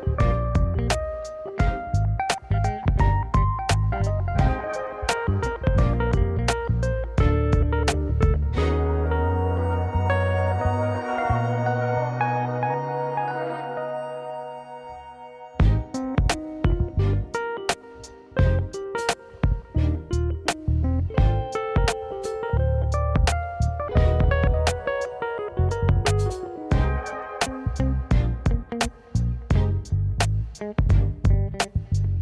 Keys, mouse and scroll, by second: 5.3-5.7 middle drag, 5.7-6.3 scroll down 2, 6.3-7.2 middle drag, 7.4 click, 8.0 drag, 12.3 KP_0, 13.7-14.2 scroll down 2, 14.8 shift+a, 17.9 g, 20.8-21.7 middle drag, 22.3 g, 24.7 KP_0, 25.6 click, 26.0 click, 28.1 click.